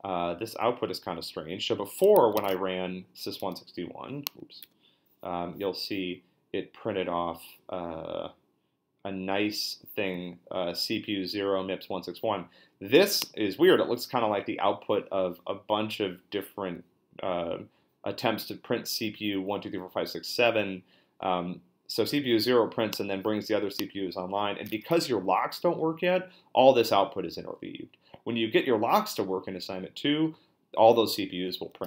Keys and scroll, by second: 2.4 ctrl+a, 3.4 BackSpace, 4.6 BackSpace.